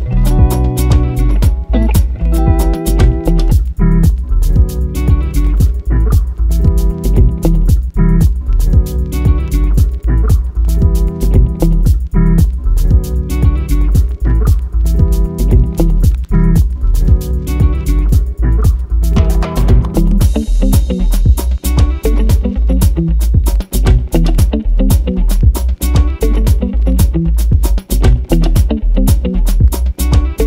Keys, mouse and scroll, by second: 1.0 ctrl+right click, 1.6 click, 1.8 s, 3.3 r, 3.8 click, 4.4 g, 6.0 g, 6.8 click, 7.4 g, 8.2 g, 8.8 r, 9.2 click, 10.4 click, 10.9 r, 13.9-15.0 drag, 15.0 right click, 15.4 click, 15.8 g, 16.7 r, 17.2 click, 18.0 shift+click, 18.4 g, 19.8 click, 20.1 r, 20.8 g, 21.1 click, 21.8 g, 22.2 click, 24.1 click, 24.9 ctrl+right click, 25.4 click, 25.6 s, 26.5 r, 26.8 click, 26.9 s, 27.3 click, 27.4 g, 27.7 click, 28.5 g, 29.4 click, 30.2 r.